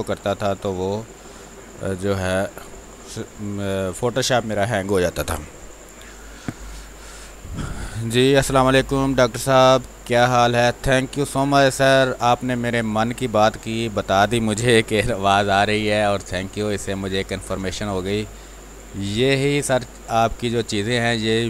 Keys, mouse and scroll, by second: 11.8 space, 12.4 ctrl+click, 13.4 r, 13.6 click, 14.6 b, 15.3 space, 15.6 click, 15.7 space, 16.1 ctrl+click, 17.7-21.4 drag.